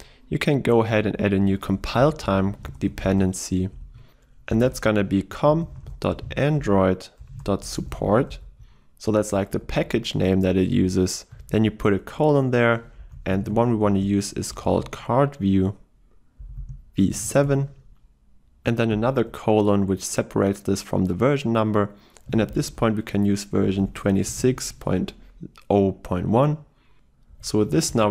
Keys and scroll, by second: 9.6 ctrl+shift+Left.